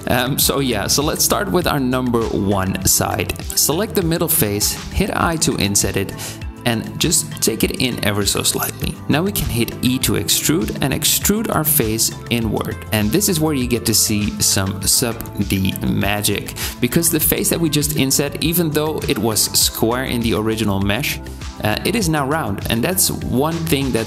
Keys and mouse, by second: 0.0 shift+middle click, 2.9 middle click, 3.4 ctrl+z, 3.4 i, 9.0 e, 13.0 Tab, 18.1 Tab, 19.4 click, 20.4 click, 21.2 click, 21.9 click.